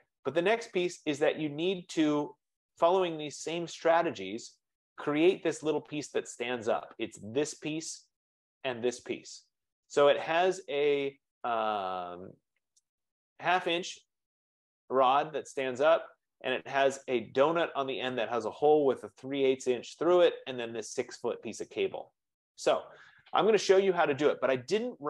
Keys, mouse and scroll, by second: 4.3 scroll, 4.5 F15, 6.3-6.7 scroll, 11.4 scroll up 6.